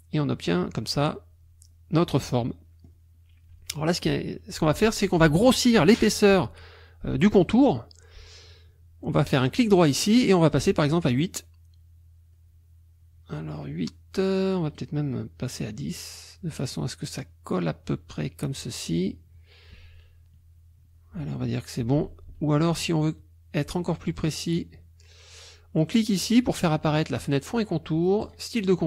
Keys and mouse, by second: 2.4 click, 9.3 right click, 10.9 click, 14.7 right click, 15.9 click, 24.1 click, 28.2 click.